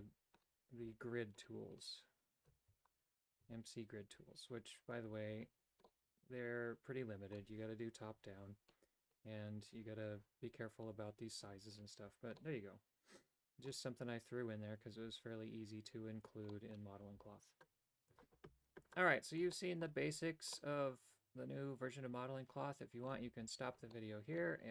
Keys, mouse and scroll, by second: 2.7 Tab, 3.5 Tab, 4.9 right click, 5.8-7.3 middle drag, 8.1 KP_7, 12.3-13.6 middle drag, 16.5 middle click, 19.7 shift+middle click, 20.6-23.1 middle drag, 23.9 shift+middle click.